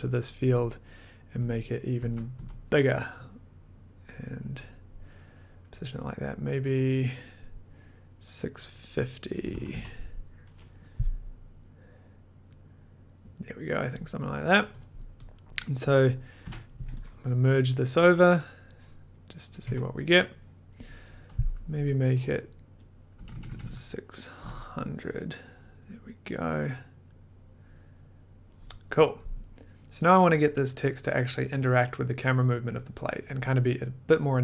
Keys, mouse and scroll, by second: 0.4-1.3 scroll up 1, 1.3 Up, 1.9 Down, 2.3 Up, 5.8 click, 7.2 click, 8.1 click, 8.7 click, 9.2-10.0 typing, 14.8 click, 14.8 typing, 15.5 click, 16.0 click, 16.4 m, 17.2 click, 17.9 click, 18.2 click, 19.1 click, 19.6 click, 19.6 1, 22.9 click, 23.2-24.4 scroll down 4, 24.4 scroll down 1, 28.5 click, 29.7 click, 29.7 middle click.